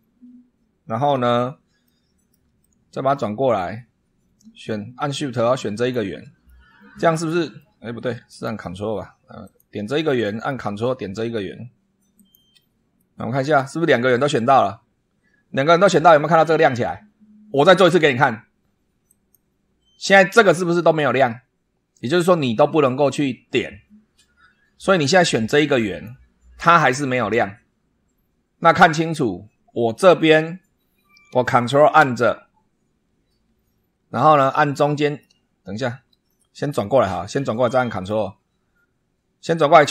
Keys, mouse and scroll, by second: 1.8 shift+middle click, 2.6-3.7 shift+middle drag, 5.7 shift+click, 6.4 shift+middle click, 6.8 click, 8.2 click, 9.4 click, 9.9 middle click, 12.1 ctrl+click, 12.9-13.7 ctrl+middle drag, 19.0 click, 25.8 click, 34.3-35.3 ctrl+drag, 36.2-36.5 ctrl+scroll down 3, 36.6-38.2 middle drag, 38.3 scroll up 2.